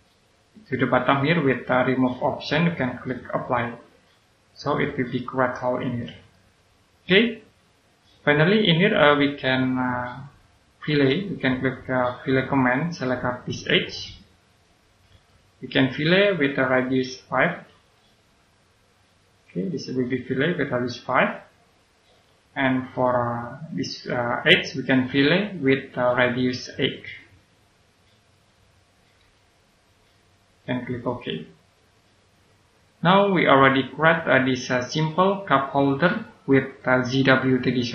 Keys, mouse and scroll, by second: 3.4 click, 4.3-4.7 scroll down 1, 4.7 right click, 12.4 click, 15.2 right click, 17.3 click, 18.1 5, 19.2 click, 21.9 click, 22.9 right click, 25.5 click, 29.1 8, 30.1 click, 32.6-33.1 scroll down 1, 33.1 right click.